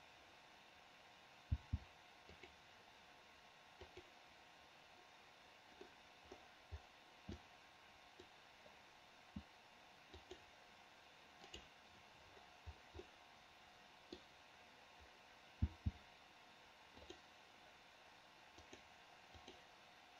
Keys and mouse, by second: 1.6 c, 13.2-14.3 middle drag, 15.7 c.